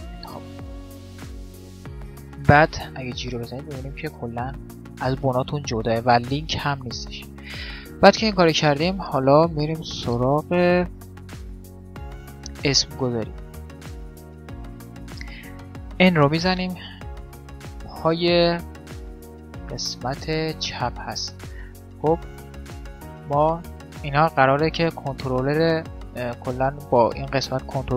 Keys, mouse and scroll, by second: 2.5 g, 7.4-13.3 middle drag, 15.9 n, 16.9 right click, 17.6-18.6 drag, 18.9-24.5 middle drag, 23.5-27.9 right drag.